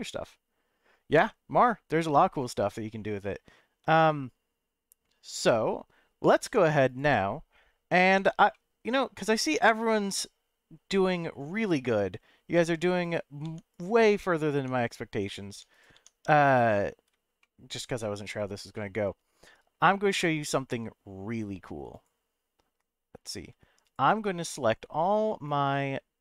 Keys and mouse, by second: 5.3 click, 6.4 Tab, 8.1 Tab, 8.5-11.1 middle drag, 13.0 click, 13.4 Tab, 14.5 Tab, 15.5 Tab, 15.7 click, 15.9 Tab, 17.4 shift+middle click, 18.7 middle click, 25.5-26.2 drag.